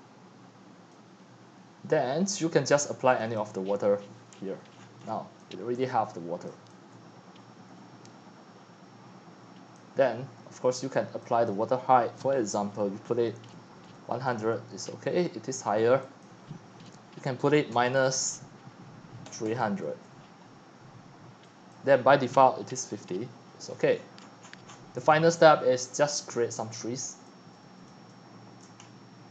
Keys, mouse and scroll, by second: 4.1 click, 4.7-5.6 scroll down 10, 5.6-9.9 typing, 9.8 click, 11.0-14.0 drag, 13.7-14.7 typing, 14.8 Return, 16.4 click, 19.0-20.0 typing, 21.8 click, 22.4-23.2 typing, 23.7-24.1 scroll down 11, 24.1-24.7 shift+middle click, 24.2 shift+middle click, 24.7 shift+middle click, 24.8-28.5 typing, 26.4 click, 27.9 right click, 28.6 right drag, 28.8-29.3 scroll up 13.